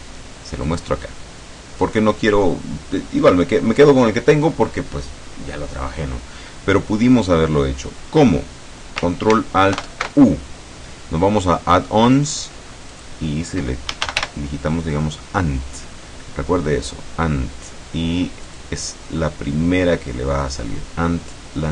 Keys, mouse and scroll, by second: 0.8 click, 9.8 ctrl+alt+u, 13.0 click, 14.0 a, 14.1 n, 14.2 t, 18.5 click.